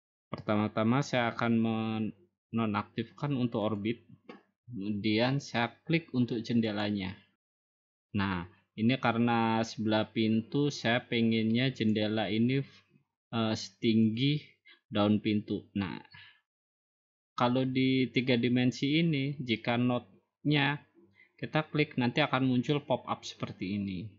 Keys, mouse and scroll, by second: 3.8 click, 6.8-8.0 drag, 11.9-13.0 drag, 14.1-15.3 drag.